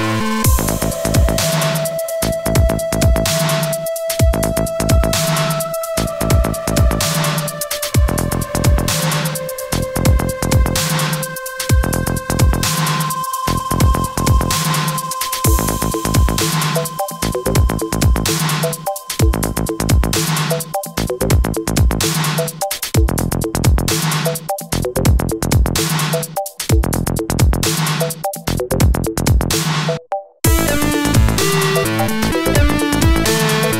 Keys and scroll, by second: 5.1 ctrl+t, 10.9 0, 16.9 space, 20.1 Left, 31.4 ctrl+j.